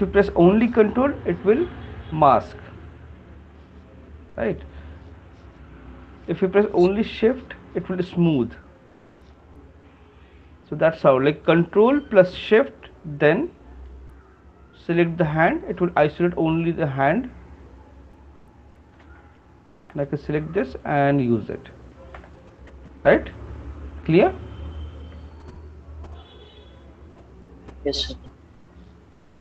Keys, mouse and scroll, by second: 2.9 ctrl+click, 2.9 scroll up 2, 4.5 ctrl+click, 5.8 ctrl+click, 15.0 click, 18.9 shift+click, 19.0 shift+click, 20.0 click, 20.4 alt+click, 21.3 alt+click, 21.4 shift+click, 22.1 click, 22.8 w.